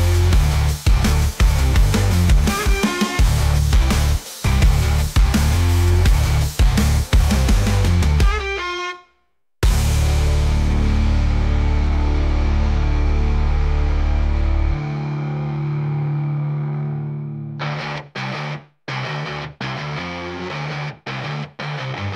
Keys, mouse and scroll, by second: 1.0-1.3 scroll up 6, 2.0 g, 4.1-4.9 scroll up 4, 4.9 g, 6.6 s, 11.9 s, 17.3 scroll down 5, 17.6-18.7 middle drag, 18.7-19.3 scroll up 1, 19.3 g.